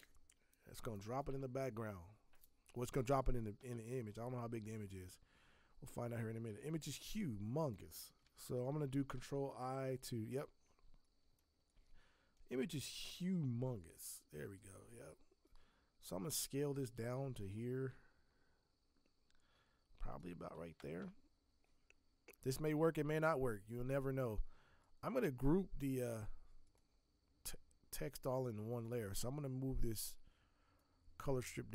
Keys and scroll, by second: 9.4 ctrl+t, 31.5 z.